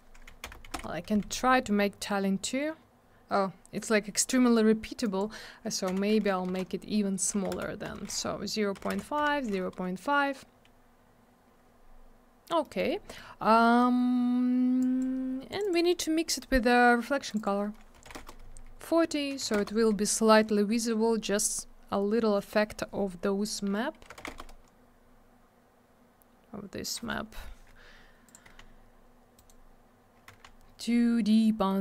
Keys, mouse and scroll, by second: 0.3 2, 0.4 Return, 0.5 Tab, 0.6 2, 0.7 Return, 5.0 click, 5.2 click, 5.9 4, 6.4 BackSpace, 7.3 0, 8.1 Tab, 8.7 0, 9.5 Tab, 12.6 middle click, 12.7 middle click, 12.9 scroll down 1, 13.1 middle click, 14.8 click, 15.0 click, 15.5 click, 15.6 click, 15.6 click, 15.7 click, 17.3 click, 17.3 click, 17.4 click, 17.4 click, 17.7-19.4 typing, 19.5 Return, 24.3 Return, 28.2 click, 28.3 click, 29.0 scroll up 1, 29.4 right click, 29.4 right click, 30.6 scroll up 1, 31.3 middle click.